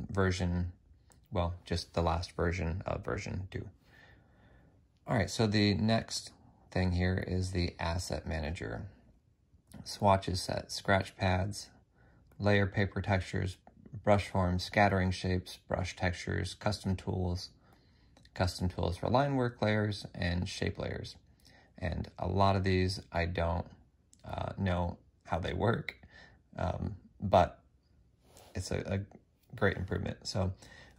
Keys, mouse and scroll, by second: 5.7 F6, 6.7 F6.